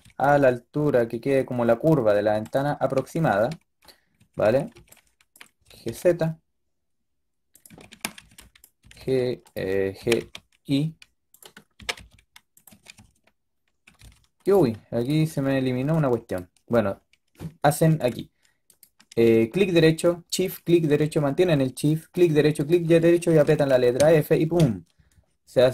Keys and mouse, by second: 2.8-5.5 typing, 7.6 a, 7.8 a, 8.1 a, 8.7 g, 9.9 g, 11.7-13.9 typing, 17.9-23.3 middle drag, 23.3 f, 23.9 a, 24.5 KP_3.